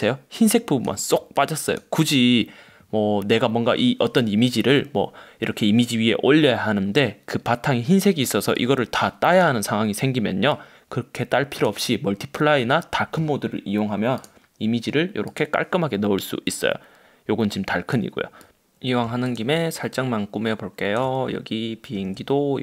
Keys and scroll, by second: 22.1 super+t.